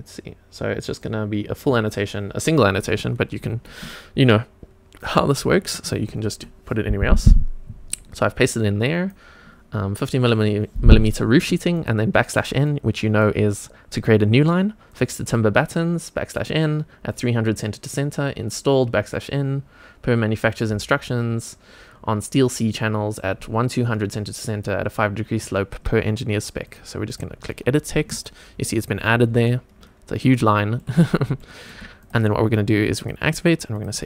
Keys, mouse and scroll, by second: 5.0-26.7 drag, 27.1 click, 28.1 click, 28.9-29.4 scroll down 1, 29.5-30.8 shift+middle drag, 31.0 scroll up 2, 31.4 shift+middle drag, 32.0 click, 33.0 click, 33.7 click.